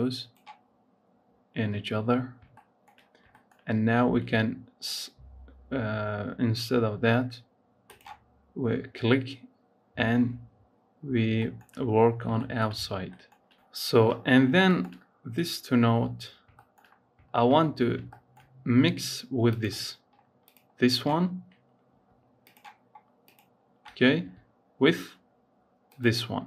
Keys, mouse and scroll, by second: 1.4 scroll down 1, 1.9 scroll up 3, 2.3 shift+middle click, 3.3 shift+middle click, 4.0 ctrl+s, 7.7 click, 9.7 scroll up 2, 11.0 scroll down 2, 11.2 shift+middle click, 11.6-12.3 scroll up 6, 12.3 shift+middle click, 12.6 scroll up 1, 12.8 shift+scroll down 1, 13.1-14.2 shift+middle drag, 14.2 scroll down 5, 14.5 shift+middle click, 19.3-22.4 drag, 23.1 ctrl+shift+click, 25.8 ctrl+shift+click.